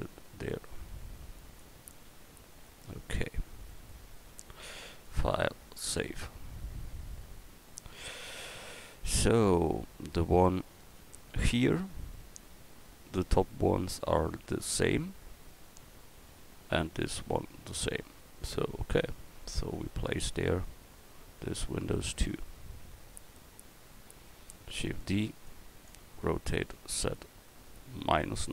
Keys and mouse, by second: 1.9 a, 5.0-7.6 middle drag, 7.6 KP_1, 9.8 middle drag, 20.5 click, 24.7 shift+d, 26.7 r.